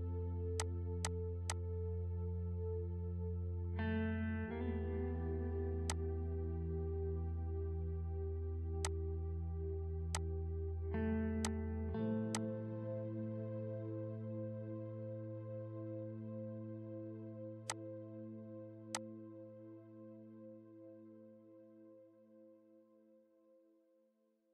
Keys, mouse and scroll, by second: 3.7-17.7 drag, 12.7 click, 19.2-24.5 drag.